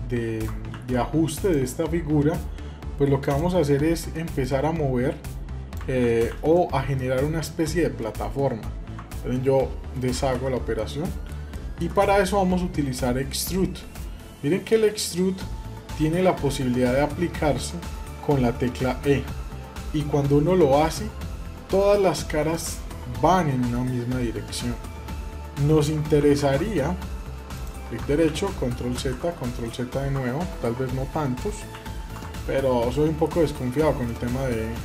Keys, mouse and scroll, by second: 0.5 ctrl+z, 1.1-5.5 drag, 5.8 ctrl+z, 6.1 ctrl+z, 6.7-7.9 middle drag, 10.5-11.7 middle drag, 28.1 ctrl+z, 31.6 ctrl+shift+z, 32.7 shift+middle click, 33.3 middle click, 33.8 shift+middle click, 34.3 scroll up 1, 34.5 middle click.